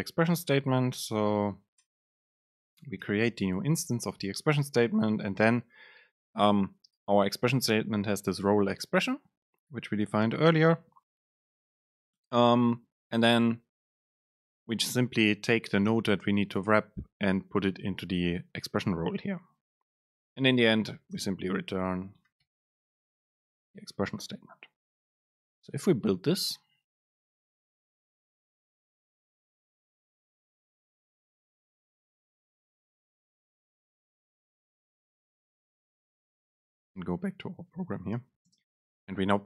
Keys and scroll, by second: 2.5 super+space, 20.4 shift+Left, 21.8 BackSpace, 23.6 Up, 38.6 super+space.